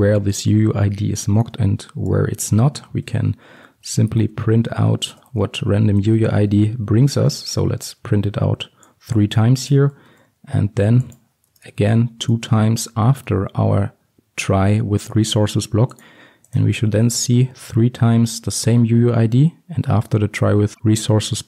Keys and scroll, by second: 3.0 Return, 6.7 Return, 7.8 ctrl+d, 10.2 ctrl+c, 14.4 ctrl+v.